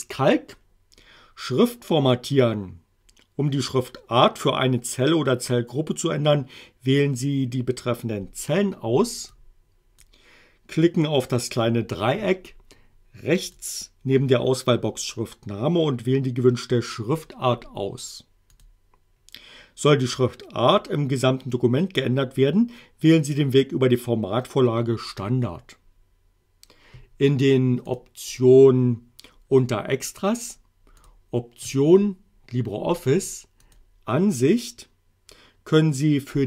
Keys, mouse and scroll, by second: 9.4 click, 13.5 click, 18.6 click, 27.9 click, 31.0 click, 33.7 click.